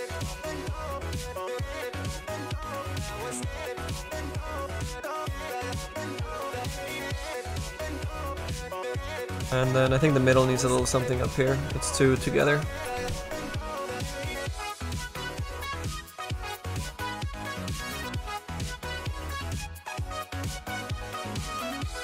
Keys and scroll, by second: 7.4 z.